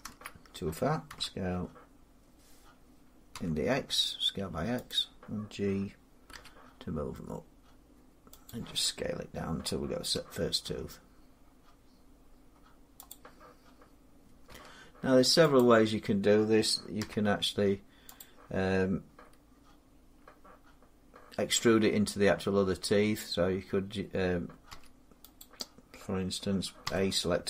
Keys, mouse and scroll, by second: 0.9 s, 3.2 x, 4.8 click, 6.2 g, 8.3 click, 10.0 s, 12.9 click, 14.3 r, 15.4 click, 16.8 g, 18.0 click, 24.5 a, 25.5 click, 26.7 a.